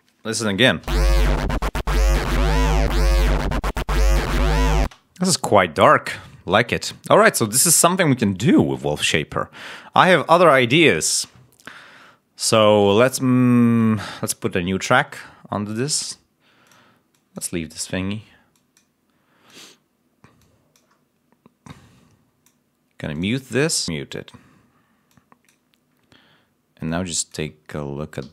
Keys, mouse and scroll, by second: 0.7 l, 5.3 space, 16.6 click, 17.0 click, 18.5 click, 19.4 click, 20.3 click, 21.6 click, 23.1 click, 24.0 scroll down 1, 25.0 click, 25.9 scroll down 1, 26.8 click, 28.1 d.